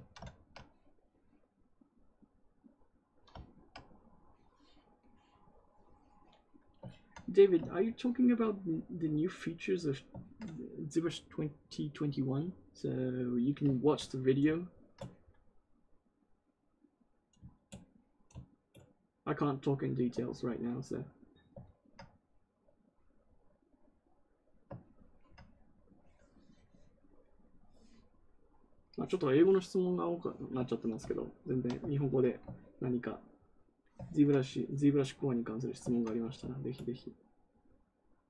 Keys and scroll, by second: 34.0 ctrl+z.